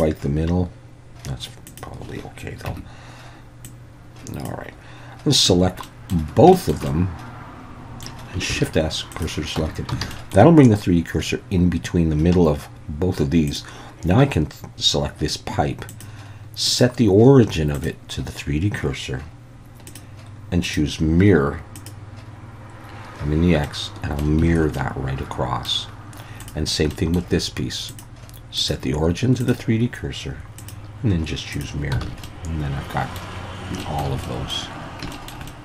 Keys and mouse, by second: 1.7 click, 2.7 Tab, 3.7 click, 5.5 a, 5.8 middle click, 6.5 shift+middle click, 6.9-8.0 middle drag, 8.5 shift+s, 9.6 Tab, 10.0 alt+a, 10.1 middle click, 13.5-17.9 drag, 19.9 drag, 20.7-21.9 drag, 23.7-24.2 middle drag, 24.5 alt+a, 24.8-25.7 middle drag, 26.9 middle drag, 27.9-29.5 drag, 30.7-31.6 drag, 32.0 alt+a, 32.3-33.2 middle drag, 33.8 shift+middle drag, 34.3 middle drag, 35.1 shift+middle drag, 35.5-35.6 middle drag.